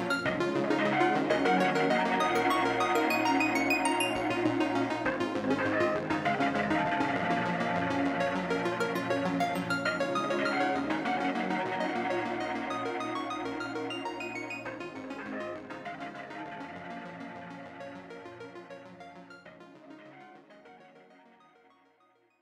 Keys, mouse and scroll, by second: 8.1 click, 8.5-10.4 shift+drag, 11.6 right click, 12.3 click, 13.7 Home, 14.1 Delete, 14.6 click, 15.5-16.2 drag, 17.0 right click, 19.1 right click, 20.3 click, 20.4-22.4 drag.